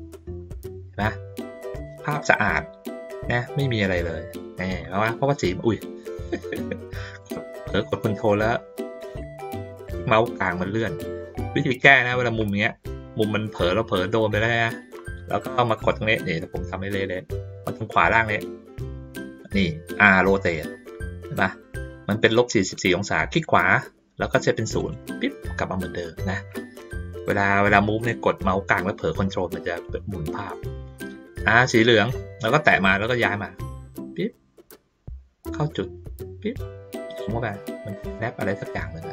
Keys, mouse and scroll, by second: 0.0 ctrl+middle click, 1.0 ctrl+middle click, 2.2 ctrl+middle click, 4.8 ctrl+middle click, 7.2-8.8 ctrl+middle drag, 9.3 ctrl+middle click, 9.6 ctrl+middle drag, 10.6 ctrl+middle click, 10.9 ctrl+middle click, 11.6-13.5 ctrl+middle drag, 14.1 ctrl+middle drag, 14.5-14.9 ctrl+middle drag, 16.2-16.7 ctrl+middle drag, 23.3 right click, 24.8 click, 26.8 click, 28.0 middle click, 29.2 middle click, 30.2 middle click, 31.4 click, 32.7-36.5 drag, 36.8 ctrl+middle click, 37.6-39.1 drag.